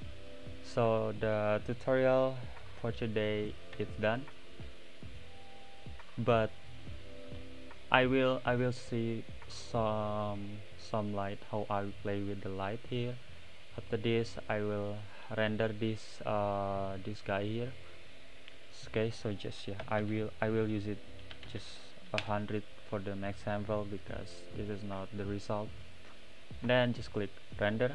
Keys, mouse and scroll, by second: 0.0 click, 3.7 n, 11.3-22.2 middle drag, 22.2 0, 25.3 click.